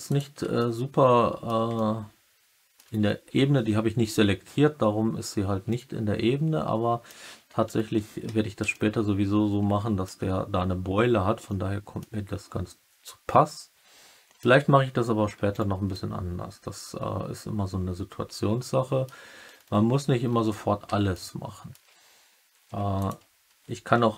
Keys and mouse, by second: 0.0 click, 0.5 alt+middle click, 1.7-2.7 alt+middle drag, 5.6-7.0 alt+middle drag, 7.2 Tab, 8.2 Tab, 8.6-10.0 alt+middle drag, 11.4 alt+middle click, 13.0-14.3 alt+middle drag, 15.8-18.8 alt+middle drag, 18.8 click, 21.0 alt+middle click, 22.6 1, 22.9 click.